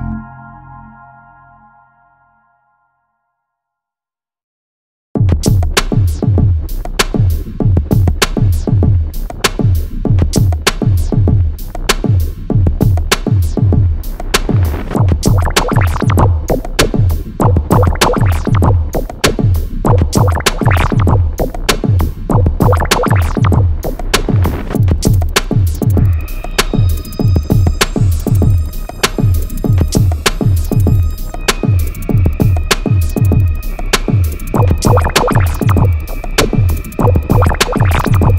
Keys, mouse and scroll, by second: 3.3 click, 7.3 Escape, 7.9 click, 8.1 d, 8.3 click, 9.3 6, 9.7 0, 9.9 Return, 11.7-12.7 scroll down 1, 12.7 Escape, 13.7 click, 15.5-15.8 scroll up 1, 17.7 l, 18.0 scroll down 1, 18.3 x, 22.3 click, 24.1 Escape, 25.1-25.6 scroll down 1, 25.6-26.0 scroll up 1, 26.4 click, 26.6-28.1 typing, 26.8 click, 28.2 Return, 28.9 Escape, 30.5 l, 31.3 x, 32.5 Escape, 34.1 l, 34.7 x.